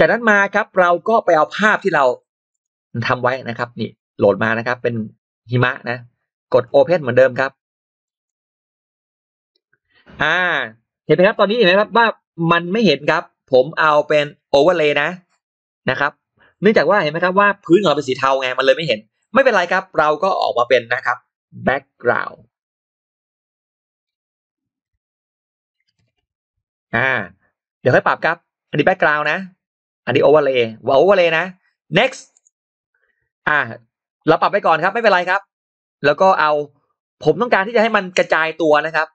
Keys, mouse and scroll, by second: 1.1 click, 2.4 click, 5.4 click, 7.9 click, 21.7 b, 23.7-26.8 typing, 28.9-30.7 typing, 29.0 click, 30.2 click, 32.2 click, 32.9 click, 33.3 click, 34.9 click, 36.5 click, 39.0 click.